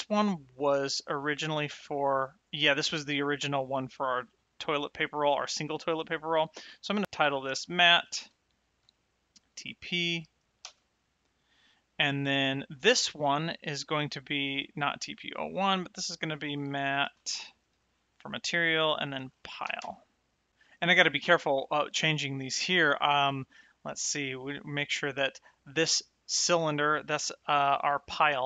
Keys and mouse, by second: 6.6 click, 7.4 m, 9.4 shift+t, 12.1 click, 13.2 click, 14.5 click, 17.1 a, 17.5 shift+_, 19.6 e, 25.2 click.